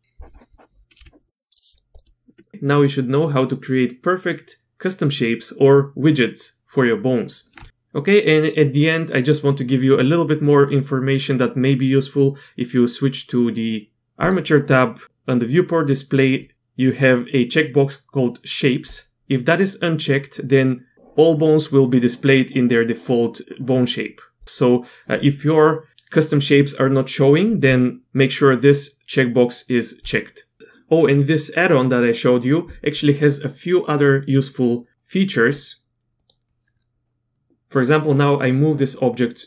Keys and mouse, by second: 1.0 g, 1.5 Tab, 1.7 click, 1.9-2.5 drag, 18.9 click, 24.4-27.9 drag, 30.0-33.3 drag, 36.1 click.